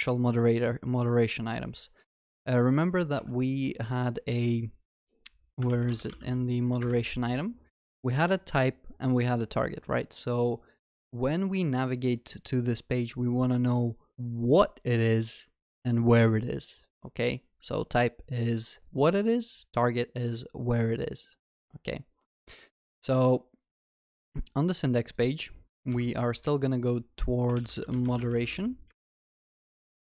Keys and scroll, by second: 6.8 ctrl+shift+n.